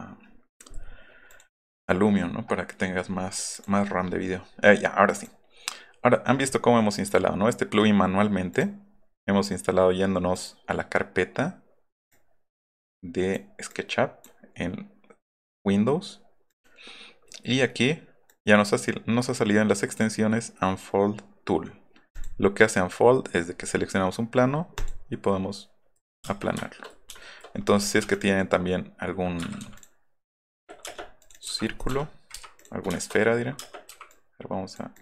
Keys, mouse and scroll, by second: 0.3 middle click, 0.6-1.0 scroll up 2, 1.3 click, 1.7 scroll up 1, 3.5 click, 5.2 click, 6.9 click, 8.5 click, 10.3 click, 12.1-13.3 drag, 13.7 click, 16.5 click, 18.3 click, 22.1 click, 24.7 click, 25.2 middle click, 26.2 space, 26.4 shift+middle click, 28.1 click, 29.6 c, 29.8 click, 30.3 click, 30.7 middle click, 30.8 space, 31.6 middle click, 32.6 click, 33.6 space, 33.9 q, 34.1 click, 34.9 click.